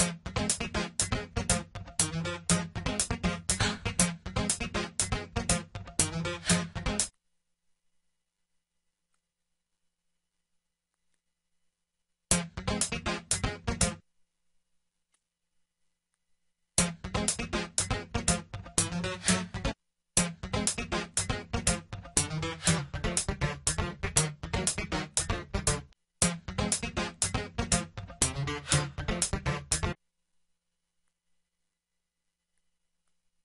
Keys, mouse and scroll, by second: 5.8 F1, 16.6 click, 17.9 click.